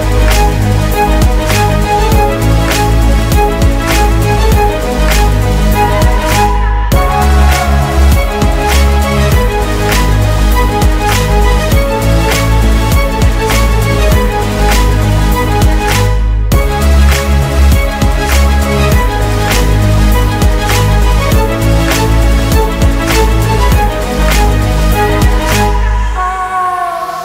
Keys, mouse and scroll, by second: 5.2 Return, 5.5-8.3 typing, 8.5 Return, 11.3 shift+click, 15.2 typing, 15.9 right click, 20.8 ctrl+z, 21.7 alt+click, 23.1-23.7 typing, 24.3 Return, 25.9 typing.